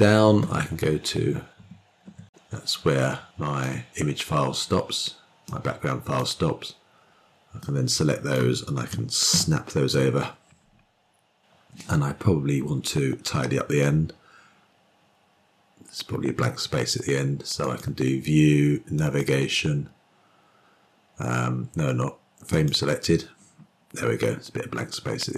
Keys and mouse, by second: 1.5 Page_Down, 2.4-4.3 drag, 6.1-6.9 drag, 8.3-9.0 drag, 10.0 typing, 18.5-23.4 drag.